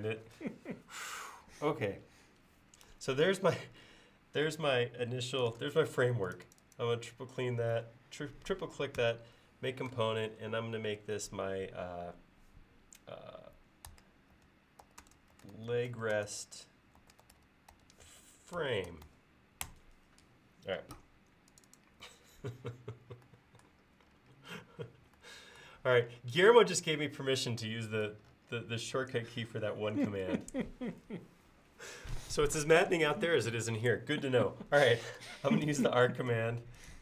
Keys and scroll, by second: 5.6 space, 9.1 g, 13.7-16.4 typing, 35.7 a.